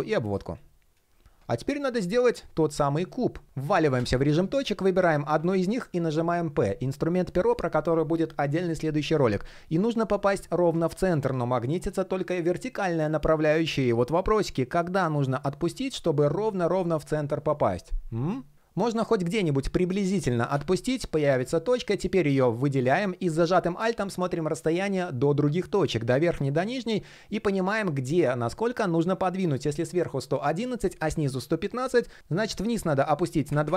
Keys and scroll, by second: 32.2 super+z.